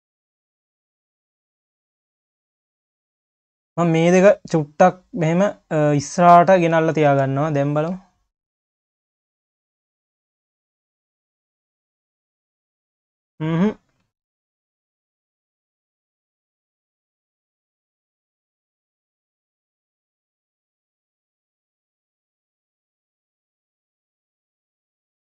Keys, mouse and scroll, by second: 0.4 click, 1.0 Tab, 1.6-2.1 scroll up 4, 2.1 1, 2.7 click, 3.3-4.0 scroll up 1, 4.0 click, 6.8 scroll down 2, 7.1 Tab, 7.5 click, 7.9 q, 8.8 click, 9.8 shift+click, 11.1 ctrl+KP_Add, 12.1 q, 12.9-14.0 scroll down 7, 14.0 q, 15.2 q, 18.3 click, 18.8 scroll up 2, 19.1 q, 20.0 click, 21.1 click, 21.8 q, 22.3-22.8 scroll up 5, 22.8 q, 23.7 q.